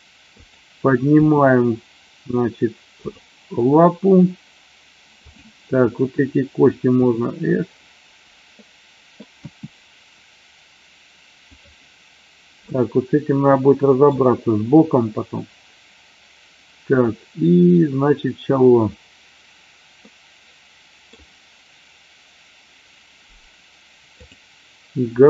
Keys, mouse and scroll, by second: 0.4 click, 1.1 g, 3.0 click, 5.1 click, 6.9 e, 9.3 s, 11.5 click, 12.8-14.1 middle drag, 20.0-21.0 middle drag.